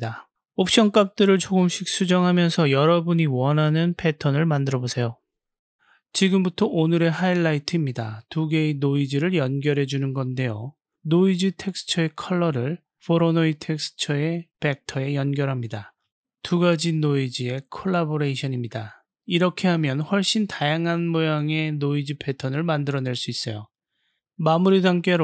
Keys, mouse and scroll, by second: 0.8-3.0 typing, 7.5 click, 11.7-12.9 drag, 17.3 click, 20.1 click, 21.6-23.2 drag, 24.1 middle click.